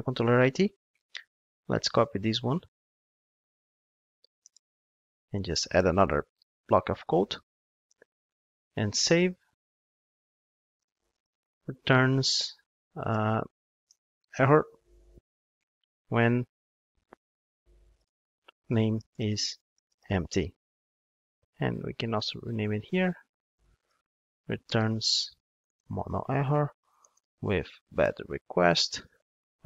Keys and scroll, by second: 2.0 super+c, 5.9 super+v, 17.0 alt+shift+Right.